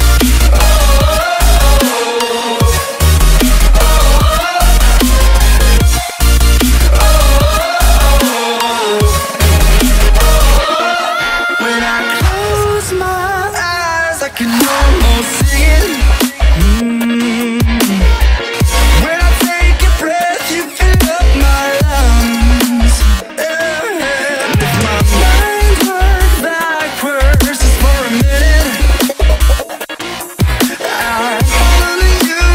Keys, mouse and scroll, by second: 0.3 Tab, 0.4 F10, 1.4 click, 2.1-3.4 typing, 3.5 Return, 4.2-5.8 drag, 7.0 right click, 7.6 Tab, 8.2 click, 8.8-10.9 typing, 11.1 Return, 12.0-15.1 drag, 14.6-16.8 typing, 17.8-20.7 drag, 20.7 F10, 20.9 right click, 22.0 click, 22.7-23.8 typing, 24.7-27.9 drag, 28.1 shift+0, 28.3 shift+0, 28.6 Return, 29.7 click, 31.1 right click, 32.1 b, 32.2-32.5 drag.